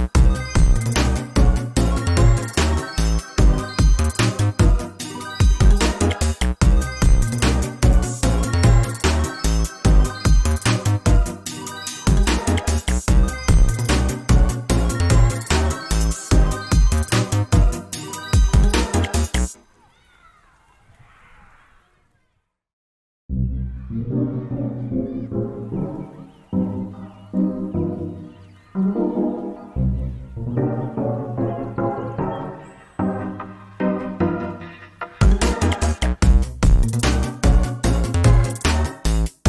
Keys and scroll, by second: 1.4 ctrl+space, 3.9 ctrl+space, 7.3 ctrl+space, 9.3 ctrl+space, 14.0 ctrl+z, 19.6 ctrl+space, 21.4 ctrl+z, 23.9 ctrl+space, 29.1 ctrl+space, 33.2 ctrl+space.